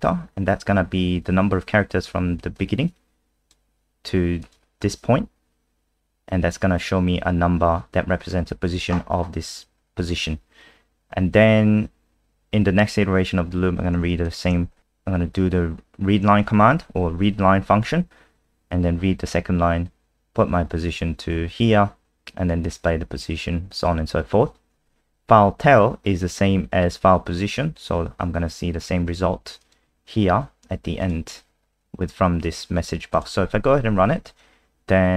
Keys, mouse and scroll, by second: 2.5 click, 14.2 shift+click, 20.9 click, 33.4 F5.